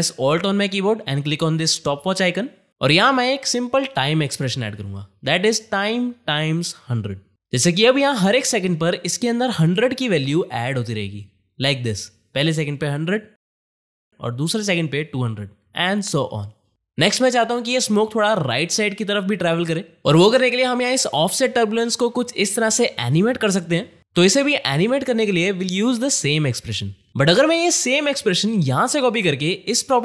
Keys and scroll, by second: 3.9-6.7 typing, 5.3 KP_Multiply.